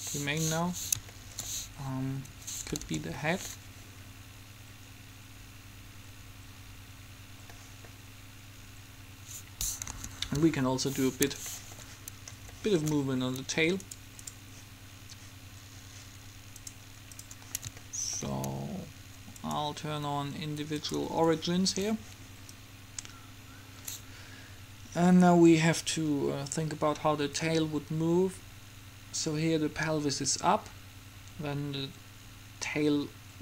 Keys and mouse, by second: 0.1 click, 0.3 click, 2.4 Escape, 2.9 alt+a, 7.7 middle click, 9.3 Escape, 9.9 KP_3, 10.5 KP_5, 16.8-18.0 drag, 18.0 middle click, 19.4-21.9 drag, 22.7-24.4 drag.